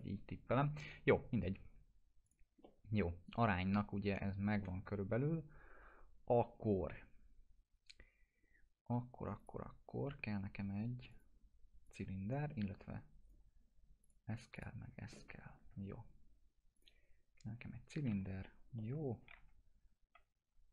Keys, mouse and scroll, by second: 2.6-4.8 alt+middle drag, 5.3 scroll up 1, 7.9 scroll down 1, 9.4 click, 13.2 right click, 14.0 click, 14.5 ctrl+click, 15.1 alt+q, 16.7 click, 18.1 t, 18.8 middle click, 19.4 F3.